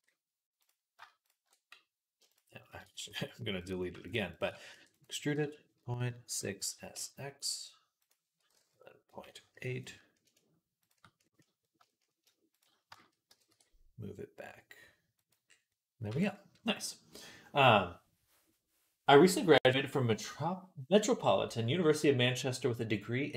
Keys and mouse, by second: 0.5 click, 0.8 shift+middle click, 1.1 alt+shift+click, 1.3-3.4 middle drag, 2.8 x, 3.4 click, 3.5 alt+shift+middle click, 3.9 alt+shift+click, 3.9 alt+shift+middle click, 4.2 alt+shift+click, 4.3-10.6 alt+middle drag, 4.5 e, 5.6 ., 6.6 s, 10.6 shift+click, 10.7-12.4 shift+middle drag, 12.4 shift+click, 12.5-15.9 shift+middle drag, 13.1 g, 15.9 Tab, 15.9-23.3 drag.